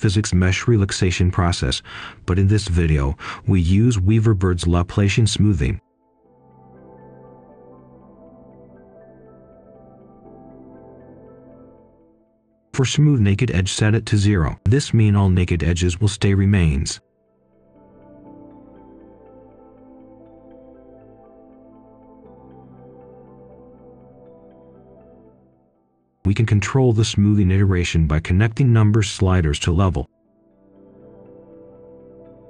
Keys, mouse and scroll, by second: 0.2 click, 0.7-2.6 typing, 2.7 Return, 3.6 click, 7.1 middle click, 7.7 click, 8.4 Escape, 8.6 shift+right click, 9.3 ctrl+right click, 12.1 ctrl+shift+h, 12.7 click, 12.9 ctrl+right click, 13.9 click, 15.2 0, 15.5 Return, 16.9-19.5 drag, 21.9-24.7 typing, 25.7-32.2 drag, 32.3 shift+right click.